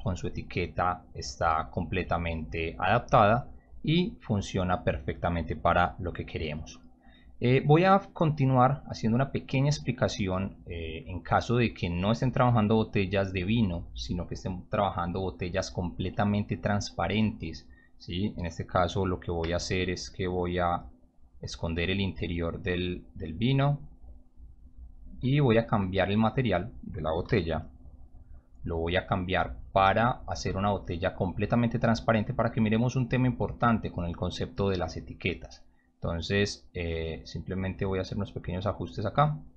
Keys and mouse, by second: 16.9 click, 19.8 click, 20.6 click, 21.4 q, 21.5 click, 22.2 click, 22.3 click, 23.0 click, 24.5 click, 26.1 click, 27.2 m, 30.7 click, 31.9 click, 32.9 drag, 33.3 click, 33.5 click, 35.8 click, 38.5-39.0 drag.